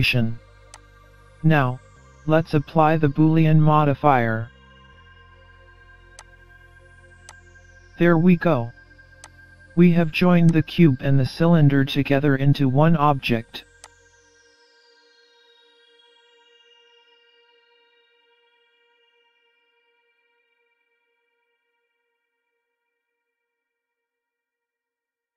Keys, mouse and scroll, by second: 1.9-2.4 scroll up 1, 2.4 middle click, 6.2 click, 8.0-8.6 scroll down 1, 8.6 scroll down 1, 9.3 click, 10.5 click, 12.7 scroll up 1, 13.0 middle click, 13.8 click, 14.3-14.8 scroll down 3, 14.8-15.1 scroll up 2, 15.2-15.8 scroll down 1, 15.8-16.2 scroll down 1, 17.3 middle click, 18.6 Tab, 19.7 scroll up 1, 20.6 alt+z, 21.3 scroll up 1, 25.2 middle click.